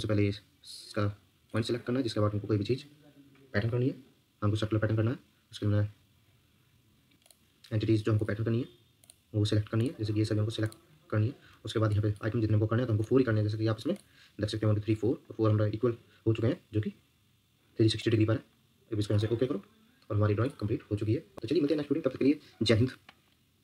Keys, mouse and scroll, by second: 7.1 scroll down 1.